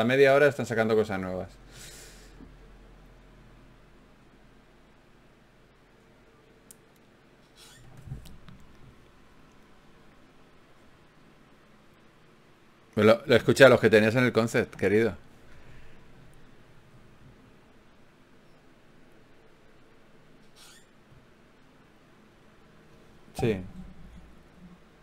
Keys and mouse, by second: 18.5 middle click, 19.1 Tab, 20.9-22.1 middle drag.